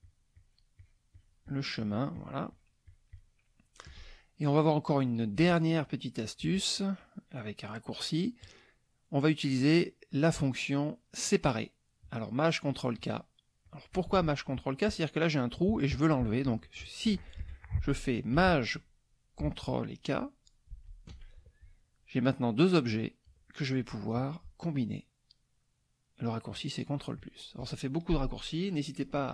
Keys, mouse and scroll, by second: 8.4 click, 13.6 click, 17.4 F1, 20.7 ctrl+shift+k, 24.2 click, 27.2 click.